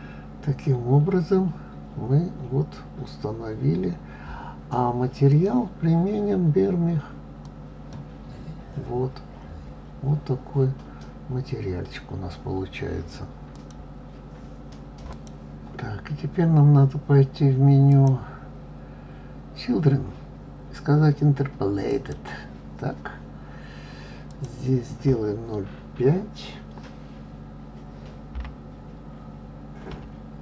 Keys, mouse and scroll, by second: 5.3-8.3 drag, 18.1 click, 22.2 click, 24.5-27.5 drag.